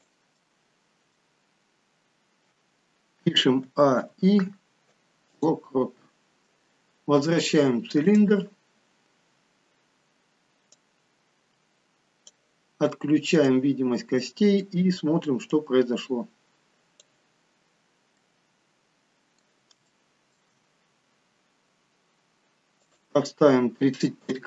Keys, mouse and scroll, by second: 0.3 middle click, 3.8 a, 4.1 i, 8.1 click, 9.2-10.0 scroll down 1, 10.8 click, 13.5 click, 13.9 scroll down 2, 14.2 middle click, 15.7 click, 17.3-18.2 scroll down 5, 18.2 middle click, 19.9 shift+middle click, 22.7 click.